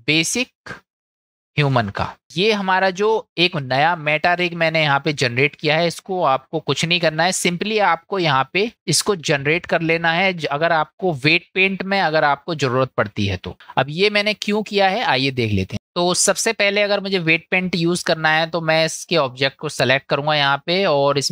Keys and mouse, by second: 4.8 click, 6.2-7.9 drag, 8.2 click, 8.7 middle click, 10.8-11.6 middle drag, 16.0-17.0 middle drag, 18.0 shift+middle drag, 19.8-21.3 drag.